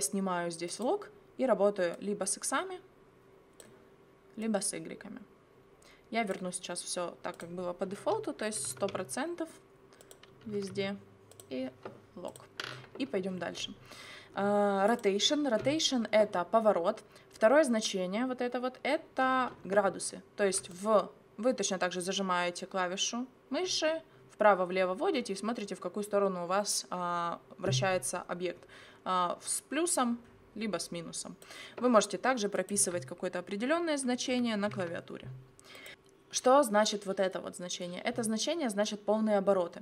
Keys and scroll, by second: 8.3-11.0 typing, 34.0-35.3 typing.